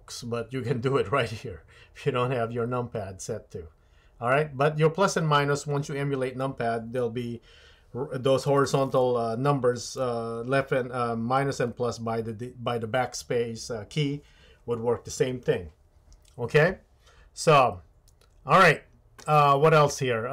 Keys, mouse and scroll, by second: 0.4-20.3 drag.